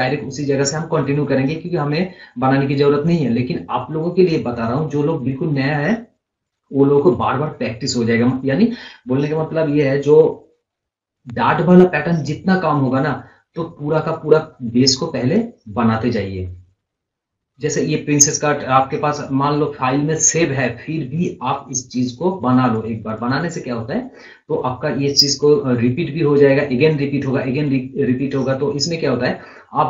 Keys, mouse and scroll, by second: 1.1 scroll up 1, 1.2 scroll down 1, 1.7 scroll down 1, 3.0 scroll up 1, 14.1-22.7 drag.